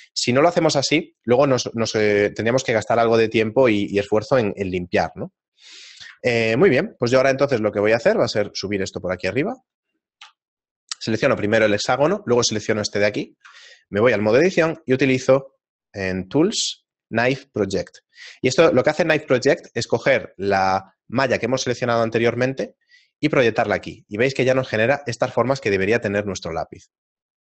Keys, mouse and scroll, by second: 6.3 shift+middle click, 7.8 middle click, 8.3 scroll down 5, 8.5 g, 9.4 shift+middle click, 10.3 KP_7, 11.5 scroll up 1, 12.3 shift+right click, 12.3-14.9 scroll up 4, 14.9 Tab, 14.9 middle click, 16.1 click, 17.8 click, 21.8 shift+middle click, 23.3 middle click, 23.3-24.9 scroll down 2.